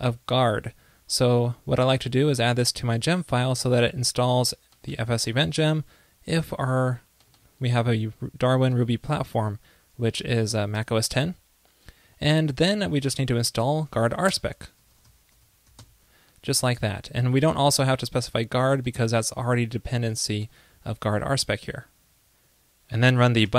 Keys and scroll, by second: 21.6 super+s.